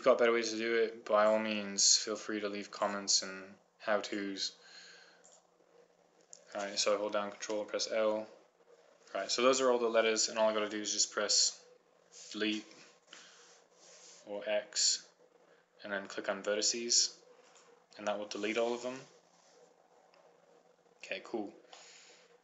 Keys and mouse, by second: 2.2-7.4 right drag, 8.5 ctrl+l, 12.1 Delete, 15.3 x.